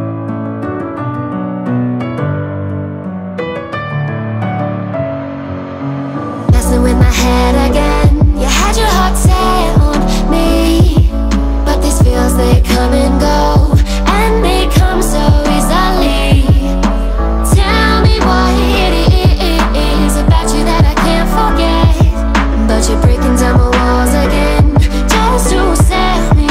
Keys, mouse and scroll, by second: 0.9 click, 1.8 g, 7.1-8.3 middle drag, 8.3-9.1 scroll up 2, 9.1 scroll down 1, 9.1 scroll up 1, 9.3-10.6 scroll down 3, 9.8 middle click, 10.6-11.3 middle drag, 11.3 g, 19.6-20.6 middle drag, 20.6-21.3 scroll down 1, 21.3 middle click, 22.2 click, 23.0 x, 24.6-26.5 drag.